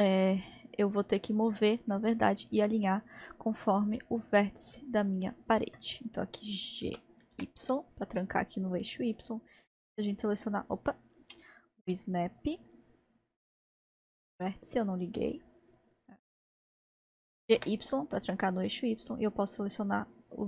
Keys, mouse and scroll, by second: 0.0-0.6 scroll down 1, 0.6 scroll down 1, 0.8-3.2 scroll up 2, 3.2-5.2 drag, 5.1-6.8 scroll down 2, 6.8 scroll down 1, 6.9 g, 12.7-15.6 drag, 16.0-17.3 drag, 17.3 g.